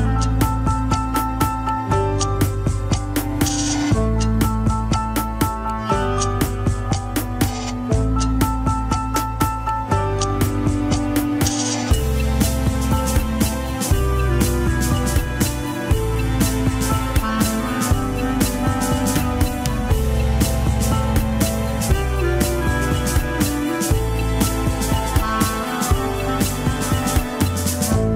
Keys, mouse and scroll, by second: 0.0 shift+middle click, 0.2 scroll up 1, 0.5 g, 2.6-4.6 drag, 11.5-12.0 scroll down 3, 12.0 ctrl+s, 12.1-12.6 scroll up 7, 12.4 shift+middle click, 13.0 click, 13.4 g, 15.9 click, 17.8 alt+z, 18.0 scroll up 1, 18.2 shift+middle click, 18.9 click, 20.7-22.8 drag, 22.9 g, 23.7 scroll down 3, 23.9 shift+middle click, 24.5-25.0 drag, 25.7-27.1 drag, 27.3 g.